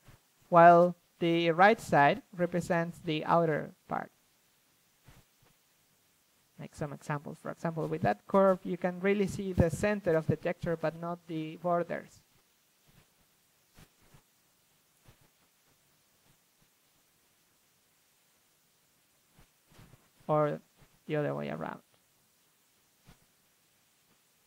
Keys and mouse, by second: 1.3-4.6 drag, 4.6 f, 6.1 right click, 7.7-13.7 drag, 10.3 f, 13.7 f, 13.8-15.3 drag, 15.2 ctrl+z, 16.4-20.6 drag, 22.9 a.